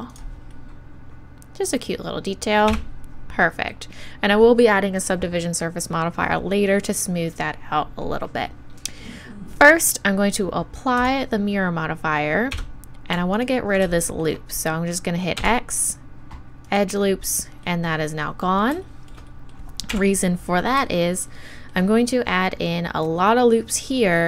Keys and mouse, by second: 0.1-2.1 drag, 2.1-2.7 middle drag, 2.7 Tab, 11.0-12.5 drag, 12.5 Tab, 13.3-15.4 right drag, 15.4 x, 19.9 KP_1.